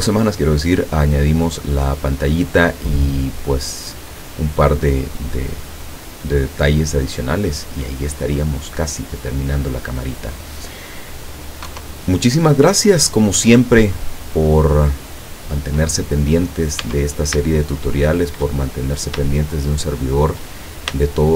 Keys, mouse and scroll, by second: 4.4 scroll down 2, 5.1-10.3 drag, 11.7 KP_0, 14.1-14.5 scroll up 2, 15.5 scroll up 2, 16.2-16.8 scroll down 2, 16.8 Tab, 16.8-17.4 scroll down 1, 17.4-18.2 shift+scroll down 1, 18.2 shift+middle click, 19.3 shift+middle click, 20.1 shift+middle click, 20.9-21.3 shift+middle drag.